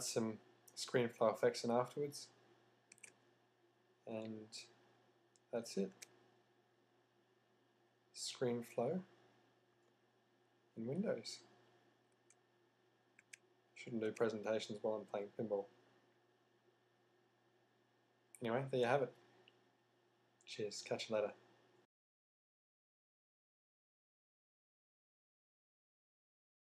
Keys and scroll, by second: 0.0 /, 2.9 z, 3.7 z, 5.9 z, 7.7 z.